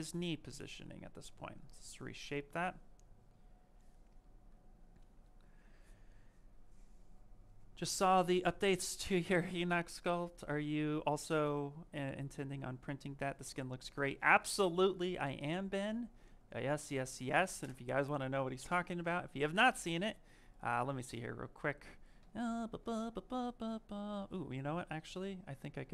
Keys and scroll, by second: 24.0 Escape.